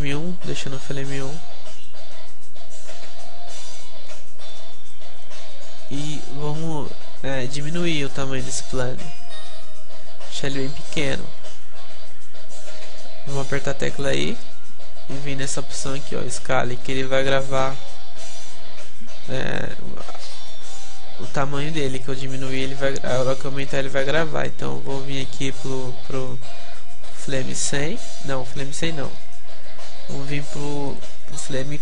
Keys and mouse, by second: 1.5-7.6 middle drag, 7.6 s, 9.0-10.4 drag, 9.0 s, 11.8-15.7 drag, 11.8 KP_Decimal, 22.0-26.3 middle drag, 26.3-28.4 drag, 30.6-31.8 drag.